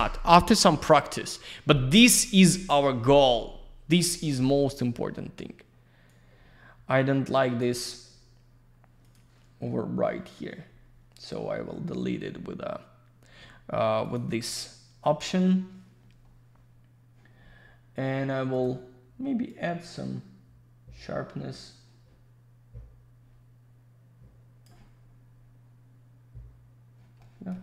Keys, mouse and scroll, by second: 6.0 click, 9.0 click, 9.1 click, 10.6 scroll up 1, 11.5 scroll down 1, 14.0 click, 14.1 click, 16.1 scroll up 1, 18.5 click, 18.6 click, 19.4 click, 24.9-25.2 scroll down 1, 27.1 middle click.